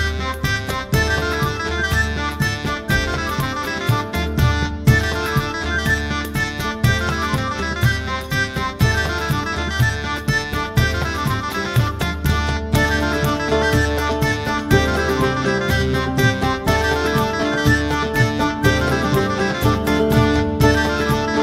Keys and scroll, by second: 9.4-10.1 typing.